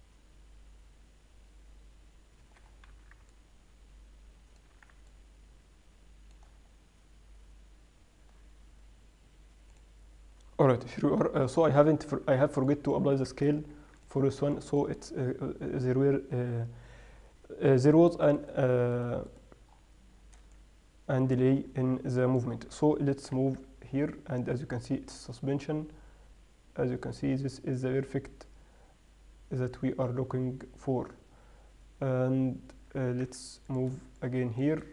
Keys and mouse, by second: 3.0-3.7 middle drag, 3.2 z, 6.3-11.1 middle drag, 11.9-13.2 middle drag, 13.9 ctrl+a, 16.4 middle click, 17.0 middle click, 20.2-21.6 middle drag, 21.7 middle click, 22.0 middle click, 22.6 middle click, 23.6 g, 24.4-25.1 middle drag.